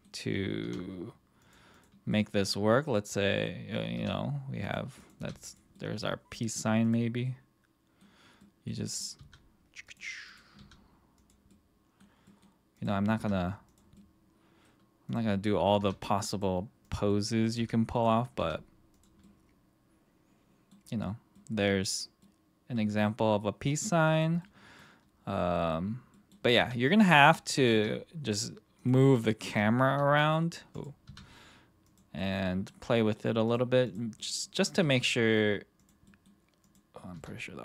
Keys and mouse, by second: 0.6 r, 1.7 click, 2.1-2.5 middle drag, 2.7 middle click, 3.1-3.4 middle drag, 3.9 r, 4.6 click, 5.2 r, 5.4 click, 5.7-6.3 middle drag, 6.8 click, 7.2-8.0 middle drag, 8.4 middle click, 8.8 middle click, 9.2 r, 9.9 drag, 10.6 r, 11.5-12.0 middle drag, 12.2 middle drag, 13.1 r, 13.9-14.6 middle drag, 15.4 middle drag, 15.8 r, 16.3 click, 17.1-17.4 middle drag, 17.6 r, 17.9 click, 18.4 r, 18.9 click, 19.2-20.7 middle drag, 21.4-21.9 middle drag, 22.2-23.1 middle drag, 23.4-23.7 middle drag, 24.4-24.8 middle drag, 25.5 middle drag, 26.1 middle click, 26.6 r, 27.3 click, 27.5 click, 28.7 click, 28.7 r, 29.4 r, 29.9 r, 30.7 click, 31.0 r, 31.9 click, 32.2-32.7 middle drag, 32.9 middle drag, 33.8 click, 34.2-34.5 middle drag, 34.8 r, 36.1 middle drag, 36.7 click, 37.1 r.